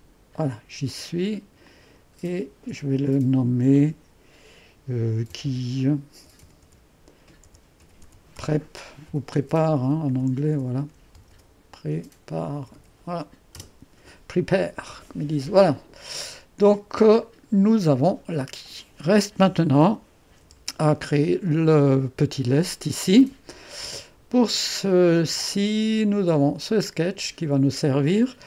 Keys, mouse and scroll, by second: 1.7 click, 3.7 F2, 5.0-13.1 typing, 13.6 Return, 17.2-19.4 drag, 19.4 1, 20.4 3, 20.9-24.1 drag, 23.9-25.4 typing.